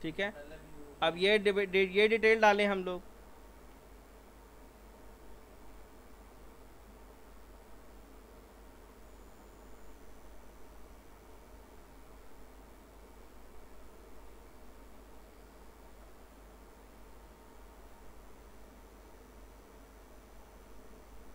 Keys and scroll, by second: 11.3 alt+r.